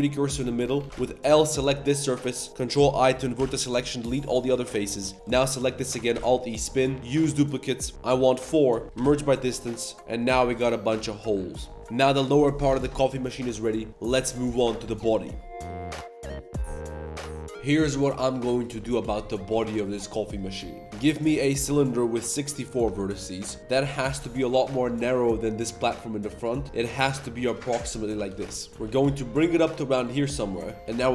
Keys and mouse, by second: 0.4 3, 0.6 a, 0.8 ctrl+s, 0.9 a, 1.5 l, 2.7 ctrl+i, 3.3 x, 4.5 a, 5.1 g, 6.1 alt+e, 7.9 click, 8.8 a, 9.1 shift+w, 9.9 Tab, 10.1 middle drag, 10.2 a, 10.3 a, 10.5-11.0 middle drag, 20.9 shift+a, 21.9-23.2 drag, 23.7 s, 28.0 Tab, 28.2 g, 28.7 g, 30.2 click, 30.5 shift+click, 30.7 ctrl+r, 30.9 ctrl+r.